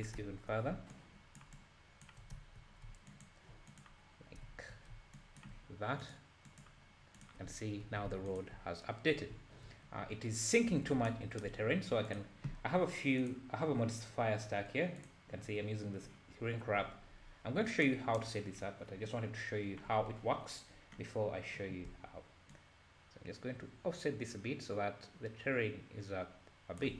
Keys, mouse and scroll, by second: 0.9-2.3 ctrl+drag, 3.1-4.4 ctrl+drag, 5.2-7.3 ctrl+drag, 8.1 alt+a, 8.3 click, 10.1 scroll up 2, 12.1 click, 13.2-17.9 drag, 20.6-22.5 scroll down 5, 22.5-25.7 shift+drag.